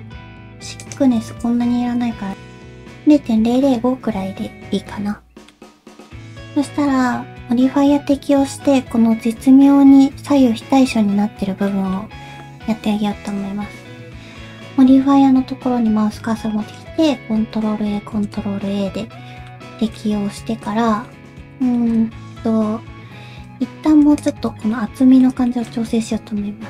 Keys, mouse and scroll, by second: 2.4 middle click, 3.6 middle click, 11.7 middle click, 14.1 ctrl+z, 17.3 ctrl+a, 17.9 ctrl+a, 18.7 middle click, 19.8 shift+middle click, 20.0-20.4 scroll up 3, 20.4 Tab, 20.8 scroll down 2, 21.1 middle click, 21.8 shift+middle click, 22.0 Tab, 22.0 scroll up 2, 22.5 scroll down 1, 23.2 2, 24.2 ctrl+alt+click, 24.5 scroll up 1, 24.7 scroll down 1, 24.7 middle click, 25.5 shift+middle click, 25.7 2, 25.9 middle click.